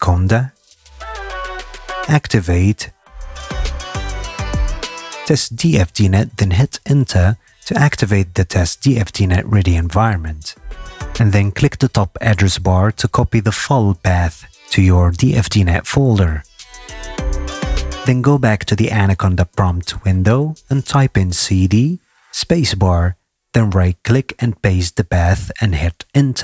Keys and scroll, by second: 0.0-3.2 typing, 5.1-6.3 typing, 6.7 Return, 21.2 c, 21.5 d, 21.8 space.